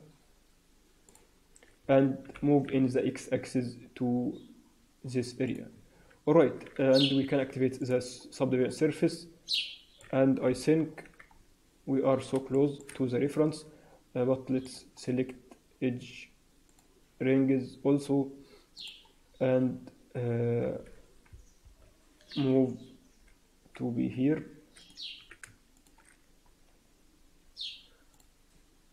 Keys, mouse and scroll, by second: 2.2 g, 5.7 Tab, 5.9-7.7 scroll down 2, 7.7 click, 7.7-8.5 scroll down 2, 8.6 alt+middle click, 10.9 scroll up 3, 10.9 KP_1, 11.2-12.0 scroll down 3, 12.0-12.3 scroll down 1, 12.5 shift+middle click, 12.9 Tab, 14.5 click, 16.6 click, 19.1-19.7 scroll up 2, 21.2 ctrl+KP_Add, 21.5 ctrl+KP_Add, 23.0 g, 25.1 s, 28.0 click.